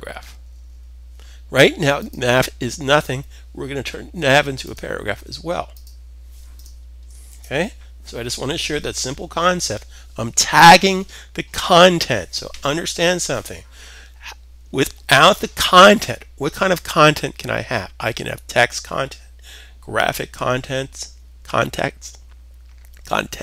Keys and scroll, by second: 6.8 super+s.